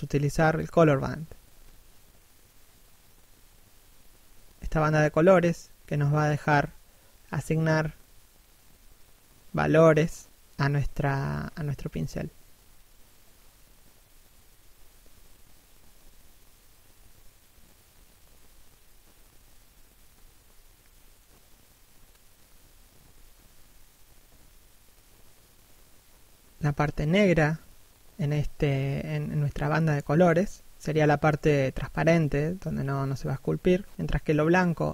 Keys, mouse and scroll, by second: 5.9 right click, 7.0 f, 7.6 right click, 9.0 f, 9.5 right click, 11.3 f, 12.7 right click, 13.5 f, 14.2 right click, 15.6 f, 16.0 right click, 32.3 f, 33.1 right click, 34.6 f.